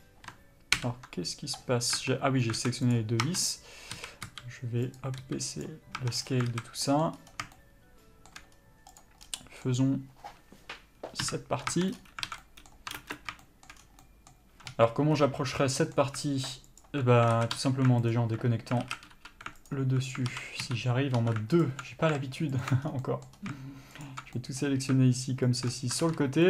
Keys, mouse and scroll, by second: 0.0 click, 1.1 ctrl+l, 2.3 Tab, 2.9 alt+a, 3.2 click, 3.5 Tab, 4.3 a, 4.6 s, 6.3 Tab, 6.4 scroll down 1, 6.8 alt+a, 7.1 middle click, 7.4 scroll up 1, 7.8 shift+middle click, 8.8 scroll up 1, 9.3 click, 9.5 scroll down 1, 9.7 middle click, 11.5 KP_Divide, 12.0 Tab, 12.2 scroll up 1, 12.6 alt+a, 12.7 middle click, 13.3 ctrl+space, 13.3-16.3 middle drag, 14.1 scroll down 1, 15.0 3, 15.4 scroll up 1, 17.1 alt+click, 17.6 alt+a, 18.4 alt+click, 19.1 alt+a, 20.0 alt+click, 20.6 alt+a, 21.5 2, 21.9 alt+click, 22.9 alt+shift+click, 23.1 scroll down 1, 23.3-24.3 middle drag, 23.6 scroll up 1, 24.3 alt+shift+click, 24.7-25.9 middle drag, 25.9 alt+shift+click.